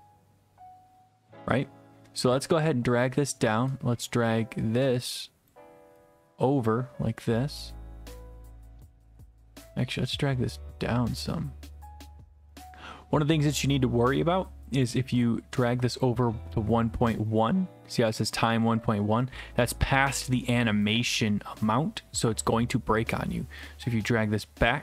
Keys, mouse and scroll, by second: 3.0 click, 5.5 click, 16.0 click.